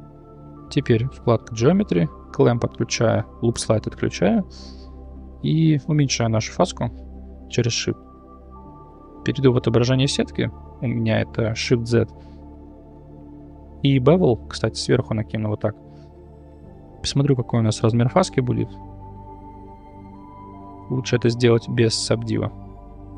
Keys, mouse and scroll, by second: 1.3 click, 2.4 click, 3.5 click, 4.1 middle click, 6.1-7.8 shift+drag, 8.3-8.6 middle drag, 8.7 shift+z, 9.5 middle click, 9.9 middle click, 13.7 click, 14.7-15.3 drag, 17.9 click, 18.7-20.5 shift+drag, 21.1 click, 22.0 click.